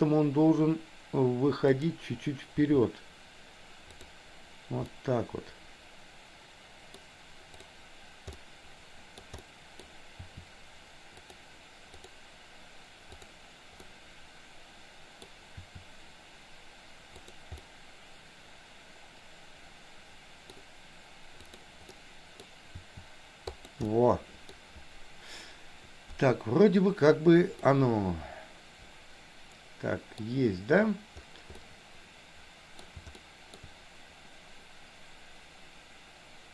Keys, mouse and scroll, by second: 2.5 r, 4.9-7.1 middle drag, 7.6 click, 8.4 middle click, 9.4 middle click, 10.2 r, 11.9 click, 13.2 click, 13.9-15.3 middle drag, 15.6 r, 17.7 middle click, 18.3 middle click, 19.2 middle click, 19.6-20.6 middle drag, 21.4 click, 21.9 middle click, 22.8 r, 23.9 middle click, 27.6-30.3 middle drag, 31.7-32.9 middle drag, 33.1 shift+middle click.